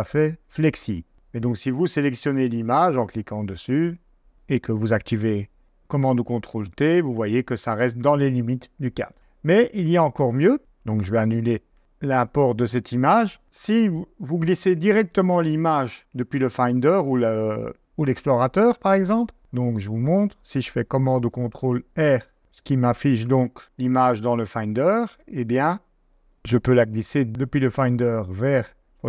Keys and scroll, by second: 5.2 super+t, 11.0 super+z, 16.3 super+Tab, 18.0 super+Tab, 21.3 super+r, 25.0 super+Tab, 26.3 super+Tab.